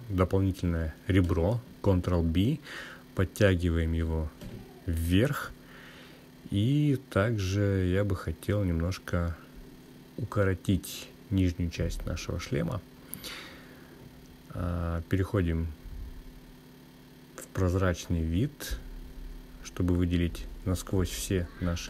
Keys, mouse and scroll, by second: 10.6 click, 11.8 click, 13.5 click, 15.0 click, 16.2-17.3 drag, 18.3-20.8 scroll down 1, 20.8 click, 20.8 scroll down 1.